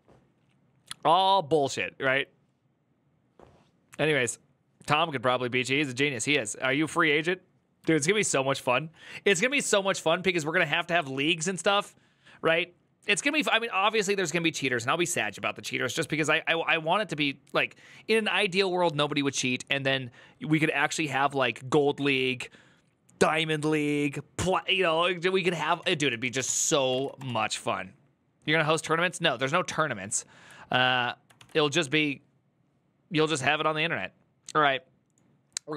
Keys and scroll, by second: 25.5 ctrl+t, 25.6-27.2 typing, 31.2 alt+f.